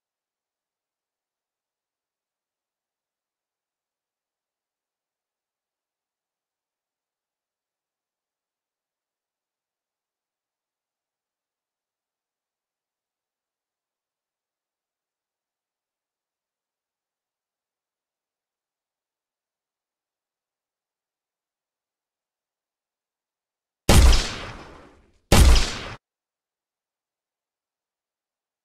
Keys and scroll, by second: 16.9 w, 20.3 s, 20.5 w, 22.7 s, 24.5 w, 25.9 Escape.